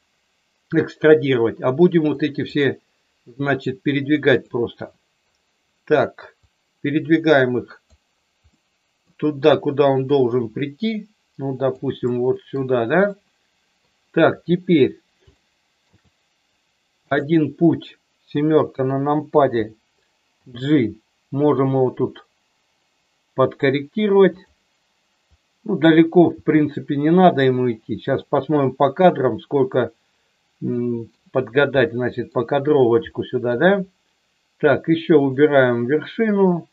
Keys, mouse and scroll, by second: 2.2 click, 6.5 click, 8.5 middle click, 10.1 click, 12.0 middle click, 13.1 middle click, 15.4 shift+middle click, 18.3 KP_7, 20.4 g, 24.3 click, 25.4 click, 26.4 g, 28.0 click, 30.7 middle click, 31.9 middle click, 33.0 shift+middle click, 35.1 click.